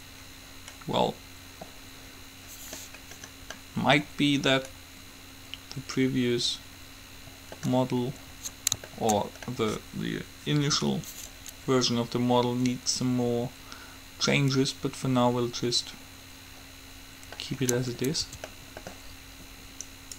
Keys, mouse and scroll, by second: 3.8-5.5 middle drag, 8.1-11.6 middle drag, 15.7-16.7 middle drag, 17.6 middle click, 18.5 Tab, 20.0 click.